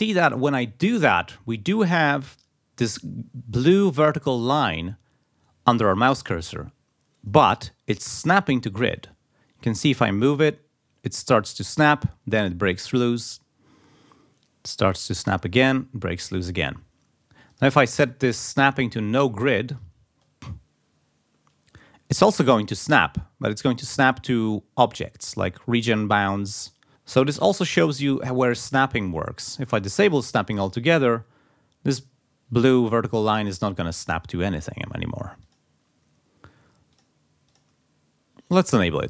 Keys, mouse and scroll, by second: 8.4-8.9 ctrl+scroll up 2, 17.5 click, 18.2-19.4 drag, 20.0 ctrl+scroll down 2, 26.7 ctrl+scroll down 2, 27.3 ctrl+scroll up 2, 29.9 click, 35.5 click, 37.0 click, 37.5 click.